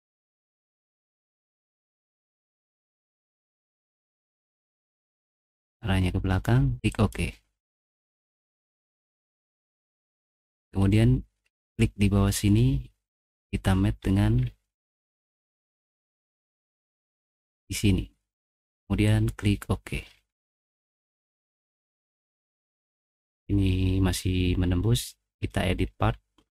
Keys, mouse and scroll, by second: 0.6 click, 6.9 click, 9.2 scroll down 2, 9.3 middle click, 9.7-10.8 middle drag, 11.6 click, 12.7 middle click, 13.6-14.4 scroll down 3, 14.4 middle click, 19.0 click, 20.1 middle click, 20.1-20.9 scroll down 4, 20.6 middle click, 20.9 scroll up 1, 21.3 middle click, 22.6 middle click.